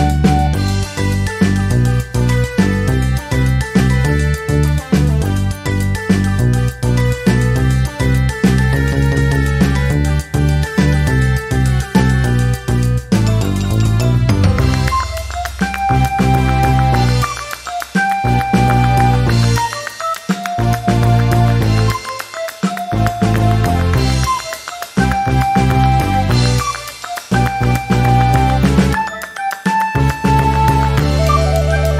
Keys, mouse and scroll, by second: 0.4-2.1 ctrl+drag, 4.8 click, 6.8 click, 8.0 click, 8.8 click, 10.1-11.2 drag, 12.0 click, 12.7 4, 13.0 Return, 15.2 click, 16.0-16.6 ctrl+scroll up 4, 16.8 ctrl+middle click, 19.2 click, 20.3 3, 20.6 Return, 22.2-23.9 drag, 24.4 click, 25.3 ctrl+shift+click, 26.8 click, 28.6 click, 29.5-30.6 drag, 31.1 ctrl+shift+click, 31.8 ctrl+shift+click.